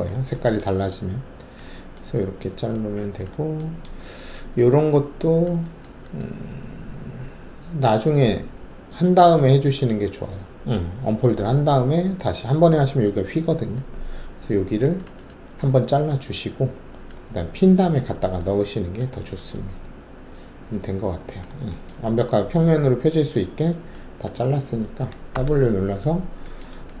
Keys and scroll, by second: 25.3 alt+w.